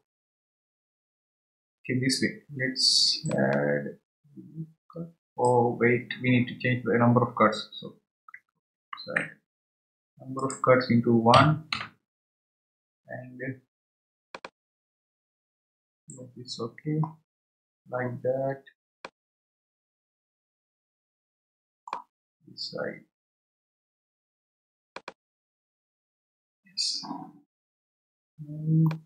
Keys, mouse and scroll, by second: 3.5-6.3 drag, 10.4-13.5 drag, 14.4-17.1 drag, 17.1-17.8 scroll down 5, 19.0-22.0 middle drag, 22.7-23.1 scroll up 2, 25.0-28.0 drag, 28.8-29.0 middle drag.